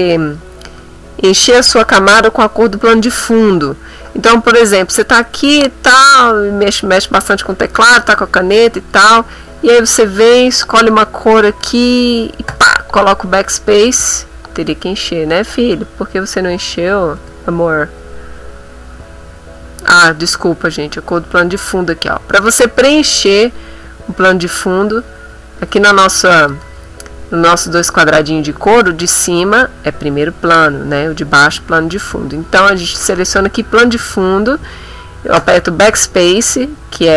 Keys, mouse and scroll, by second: 5.3 click, 10.9 click, 12.5 BackSpace, 16.6 click, 17.2 BackSpace, 21.5 click, 24.5 click, 26.3 click, 35.3 BackSpace.